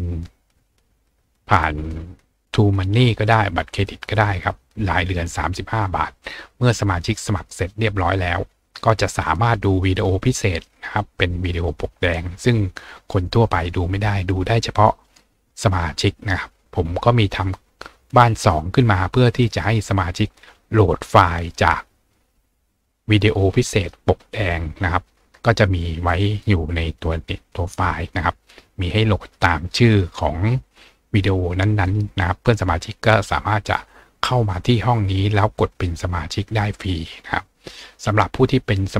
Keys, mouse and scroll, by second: 6.2 click, 10.0 scroll down 2, 10.6-11.3 scroll down 2, 19.2 click, 24.9-25.4 scroll down 2, 26.1 click, 28.3 scroll down 2, 28.8 scroll down 2, 30.8 scroll down 2, 32.1-34.8 scroll down 2.